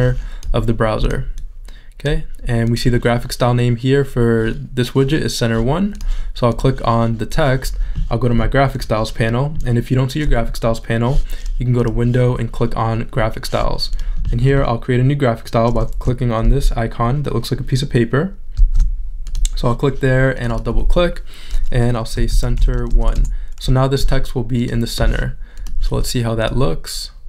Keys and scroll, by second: 16.6 shift+super+z, 18.6 shift+super+z, 22.1 c, 24.2 Return.